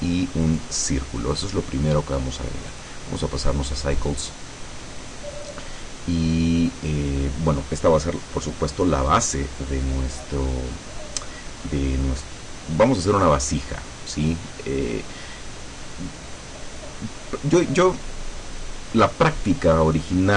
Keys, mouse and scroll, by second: 0.6 click, 1.4-1.9 scroll up 2, 1.9 scroll down 2, 2.8 click, 3.9 click, 5.4 scroll up 2, 5.9 scroll down 2, 6.3 scroll up 2.